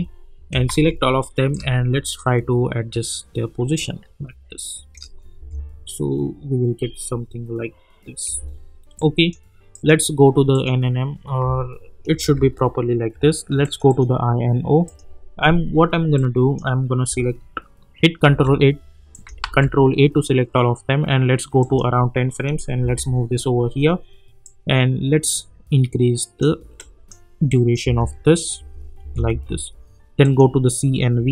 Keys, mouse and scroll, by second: 0.7 ctrl+a, 1.8-4.9 shift+drag, 5.4 space, 8.4 space, 8.9-9.6 click, 12.2 =, 13.6-18.2 drag, 18.2 ctrl+a, 19.1 click, 19.4 ctrl+a, 21.6 click, 22.8 [, 24.4-26.8 drag, 27.8 space, 30.2-31.3 drag.